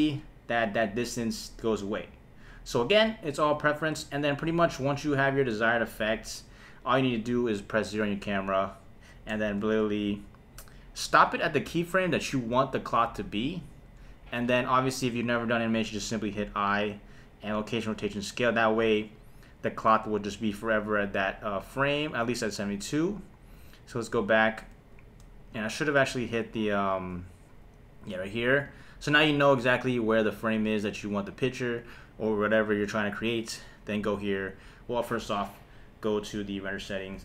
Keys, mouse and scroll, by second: 0.0 space, 4.8 KP_1, 7.7 KP_0, 9.5 shift+`, 10.2-11.2 shift+s, 11.7-12.4 shift+w, 13.0-13.8 shift+s, 14.4-15.6 drag, 16.1 i, 19.1-24.1 drag, 24.9 shift+Left, 25.5 space, 28.7 space, 30.2-31.4 drag, 33.7 click, 35.0 click, 36.2 click.